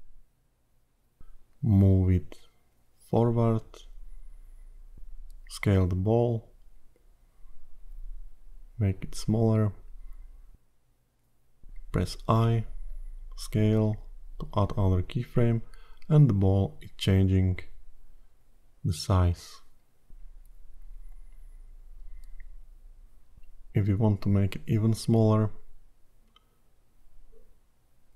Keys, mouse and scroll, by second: 1.2 click, 3.7-4.3 scroll down 2, 8.7 s, 12.4 i, 14.5 click, 21.8 click, 24.1 s, 27.2 click.